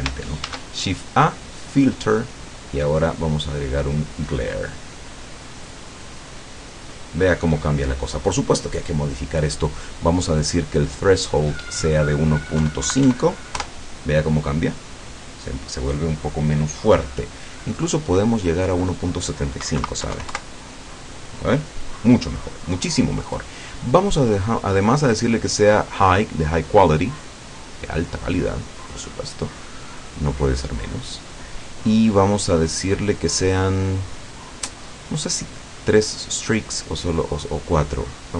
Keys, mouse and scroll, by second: 0.5 shift+a, 4.6 click, 5.8 click, 11.6 click, 12.6 KP_1, 12.9 KP_Decimal, 13.1 KP_5, 13.6 KP_Enter, 18.7 click, 19.7 KP_1, 19.9 KP_Decimal, 20.1 KP_7, 20.4 KP_Enter, 24.8 click, 25.6 click, 36.2 click.